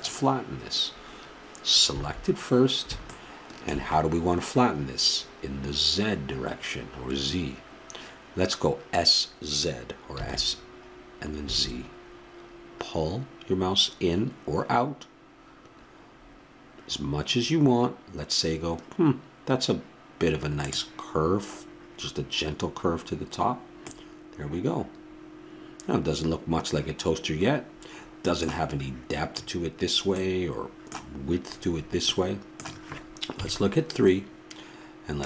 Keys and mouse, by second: 1.9 a, 23.9-26.1 middle drag, 32.1-33.4 middle drag, 33.4 KP_3.